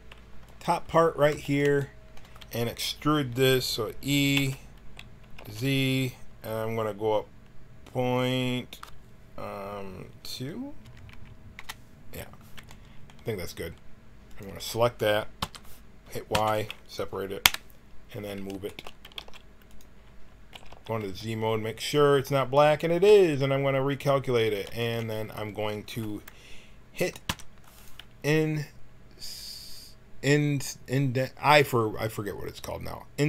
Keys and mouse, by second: 0.4 right click, 0.9-2.8 drag, 4.3 e, 12.8-14.2 middle drag, 15.3 l, 16.3 y, 17.3 KP_1, 18.9 g, 20.4 z, 20.6 z, 23.0 t, 24.7-26.2 drag, 27.2 i.